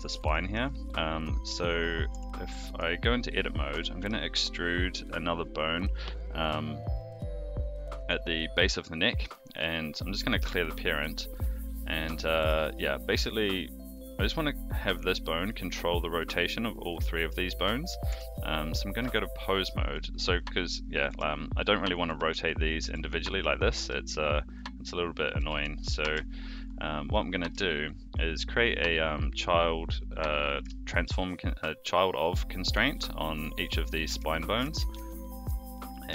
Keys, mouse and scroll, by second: 0.2-0.5 shift+middle drag, 2.1 Tab, 2.6 click, 3.7 e, 9.5 click, 10.4 alt+p, 12.2 shift+middle click, 13.3 click, 18.1 Tab, 20.3 click, 21.1 r, 21.9 click, 22.0 r, 22.7 click, 22.8 r, 23.8 a, 24.5 click, 25.4 a, 25.8 alt+g, 26.0 alt+r, 26.6 click, 27.9 shift+click, 30.8 ctrl+shift+c, 34.0 click, 34.5 shift+click, 34.7 ctrl+shift+c, 35.8 click.